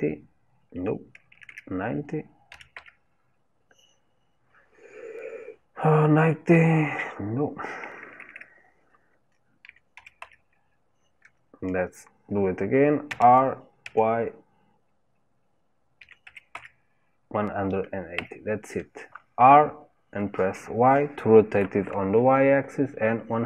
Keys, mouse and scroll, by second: 13.1 r.